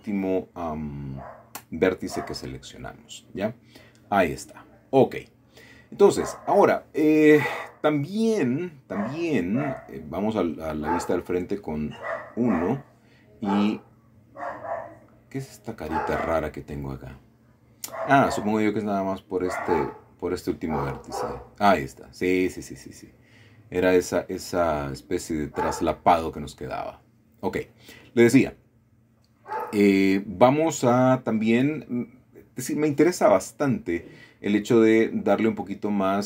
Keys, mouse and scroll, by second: 0.2 shift+click, 1.5 m, 2.1 click, 3.0-4.0 scroll down 1, 4.0-5.4 middle drag, 5.9 scroll up 1, 7.2-8.1 scroll down 1, 7.6 shift+middle click, 8.8 KP_1, 10.1 g, 14.2 middle click, 17.4 middle click, 18.2 shift+middle click, 19.4 click, 21.5 g, 23.9 Escape, 25.7 g, 26.6 click, 29.4 scroll down 1, 29.9 middle click, 31.2 scroll down 1, 31.8 middle click, 33.1 shift+middle click, 34.3 middle click.